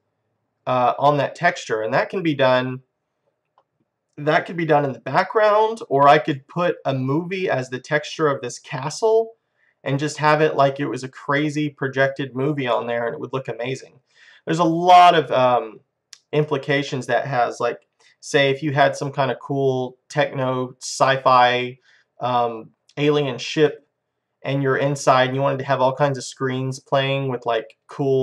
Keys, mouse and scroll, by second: 0.0 middle click, 1.7-3.6 middle drag, 6.4-11.9 middle drag, 15.1 middle click, 18.8-23.1 middle drag, 23.7-26.8 middle drag, 27.0-28.2 middle drag.